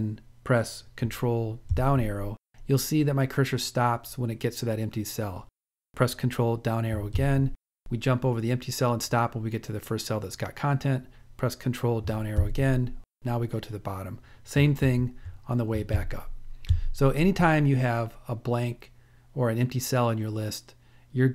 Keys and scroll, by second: 4.7 ctrl+Down, 10.6 ctrl+Down, 14.1 ctrl+Up, 15.2 ctrl+Up, 16.1 ctrl+Up.